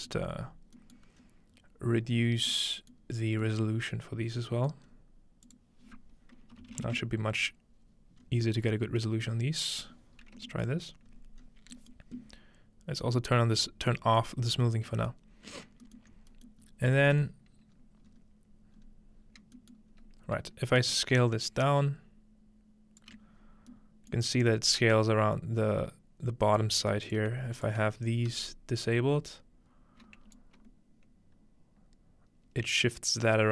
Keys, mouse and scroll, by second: 0.2 scroll up 2, 1.0-2.5 middle drag, 1.2-2.0 scroll up 2, 2.0-4.3 scroll down 2, 2.9 middle click, 4.3-4.7 scroll down 1, 4.9-5.5 scroll up 2, 5.5-6.5 drag, 8.1 scroll down 2, 8.2-9.0 scroll up 3, 9.0-10.5 middle drag, 9.9-11.1 scroll down 3, 10.7-11.9 middle drag, 11.1-11.5 scroll up 2, 13.0-14.2 drag, 14.4 middle click, 14.8-15.7 scroll up 2, 15.7 alt+middle click, 15.7-17.5 alt+scroll up 2, 16.0 alt+middle click, 16.5 middle click, 17.5 scroll down 1, 17.7-18.2 scroll up 2, 18.8 scroll up 1, 19.2 scroll down 1, 19.7-21.5 middle drag, 19.9 scroll up 1, 20.9-23.2 shift+drag, 23.5-24.3 scroll down 2, 23.7 shift+middle click, 24.3-24.8 scroll up 4, 25.6-26.7 scroll up 1, 27.0-28.4 shift+drag, 28.0-28.4 scroll down 2, 28.3 shift+m, 30.4-33.5 shift+drag.